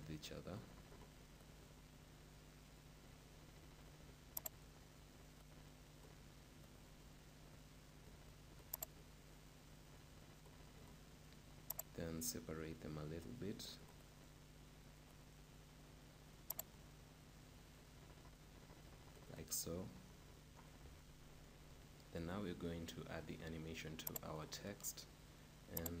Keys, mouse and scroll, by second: 1.6-3.8 right drag, 4.4-6.7 drag, 6.7-8.4 right drag, 8.8-10.6 drag, 11.8-13.7 drag, 14.1-17.0 right drag, 16.5-18.3 drag, 19.8-22.9 middle drag, 24.3-26.0 drag.